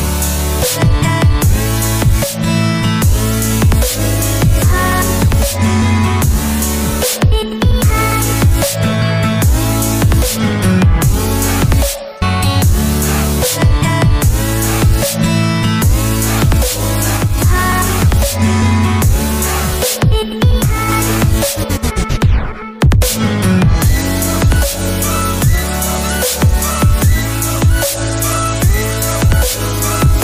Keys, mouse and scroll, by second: 3.3 ctrl+click, 5.7 double click, 6.5 typing, 6.8 Return, 10.7 ctrl+click, 13.6 double click, 14.9 0, 15.2 Return, 17.1 Escape, 20.6 middle click.